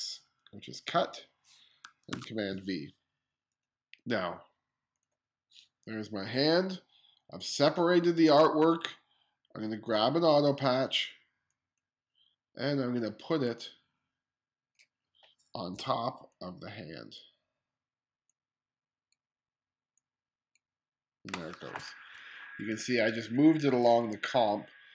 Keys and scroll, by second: 1.7 super+v, 22.2 2.